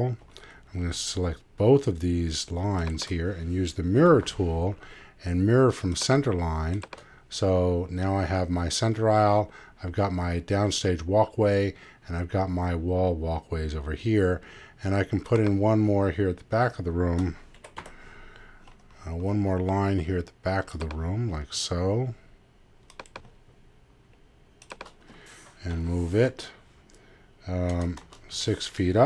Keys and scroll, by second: 27.7 0.